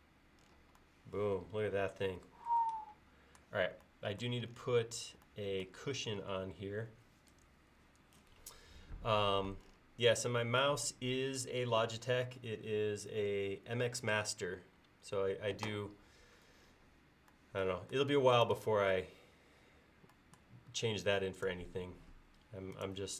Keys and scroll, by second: 20.7 l.